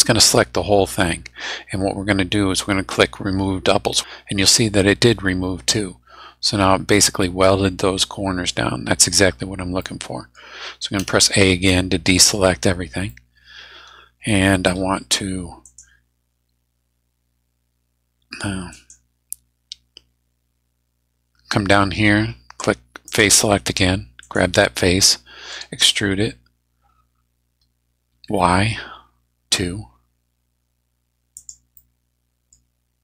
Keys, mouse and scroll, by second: 2.0 scroll down 2, 9.8 middle click, 11.0 a, 11.7 middle click, 12.3 scroll down 1, 13.1-14.9 middle drag, 15.6 right click, 18.7 right click, 23.0 click, 24.2 middle click, 25.5 e, 28.1 y, 31.4 click, 31.8 middle click, 32.5-32.8 scroll down 1.